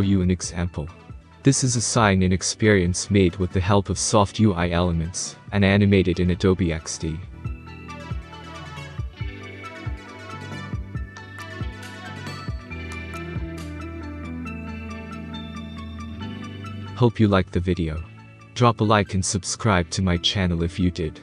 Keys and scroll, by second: 3.6 space, 4.2-7.8 space, 8.8-9.5 space, 11.0 space.